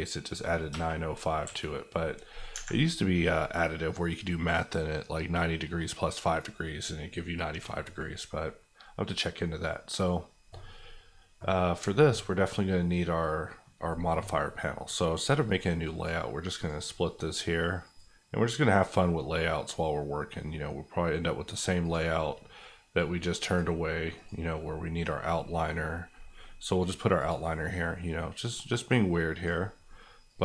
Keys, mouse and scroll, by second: 0.7 KP_Add, 1.4 KP_5, 2.5 Escape, 7.8-10.3 middle drag, 15.2 click.